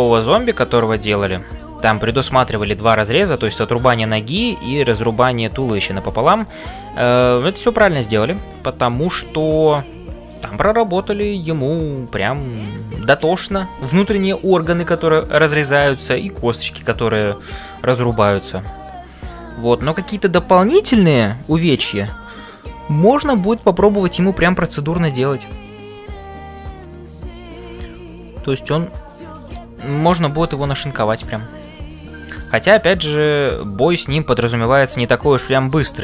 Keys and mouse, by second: 0.0-36.0 typing, 0.0 middle click, 0.7 click, 1.2 middle click, 3.5 middle click, 4.3 click, 4.8 middle click, 7.0 click, 8.6 middle click, 10.0 shift+middle click, 15.6-16.9 middle drag, 18.6-19.9 middle drag, 31.4 shift+middle click, 32.9 click, 33.3 middle click.